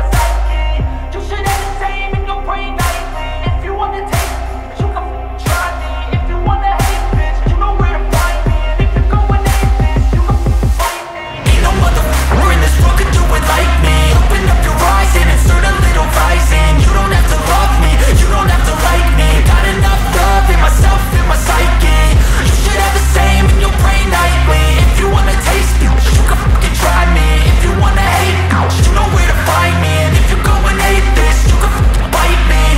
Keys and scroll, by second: 8.9-10.0 typing.